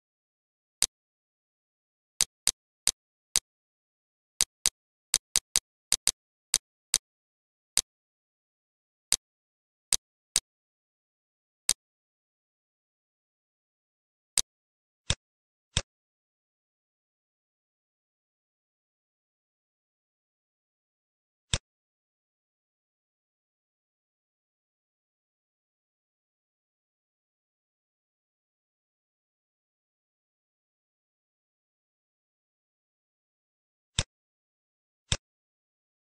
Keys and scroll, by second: 1.2 1, 1.5 Return, 7.4 ctrl+/, 8.7 Delete, 9.5 z, 10.1 z, 11.4 F1, 12.6 Delete, 12.8 -, 13.8 space, 28.9 Page_Down, 34.7 z.